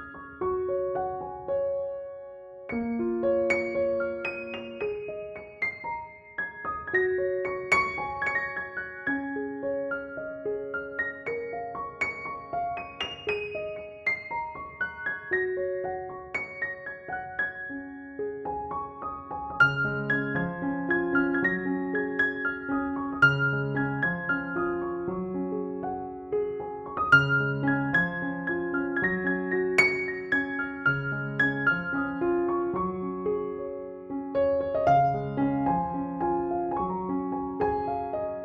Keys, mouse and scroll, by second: 0.1 [, 0.1-1.7 drag, 1.6-21.1 typing, 2.5-4.5 click, 3.1 click, 3.5 click, 4.9-5.4 click, 6.0-6.5 click, 6.4 ctrl+-, 8.0 ctrl+e, 8.6 click, 9.3 ctrl+j, 9.6 ctrl+u, 10.4-14.1 drag, 16.7-18.2 drag, 20.3-20.7 click, 21.3 click, 24.9 ctrl+e, 25.4 space, 25.7 click, 25.8-26.2 space, 27.2 click, 28.7 ctrl+=, 30.1 space, 30.1-30.7 click, 30.7 ctrl+=, 32.4 space, 32.6-33.1 click, 32.8 space, 33.5 ctrl+j, 34.8 ctrl+u, 36.0-36.5 drag, 37.3 ctrl+l, 38.0-38.4 click.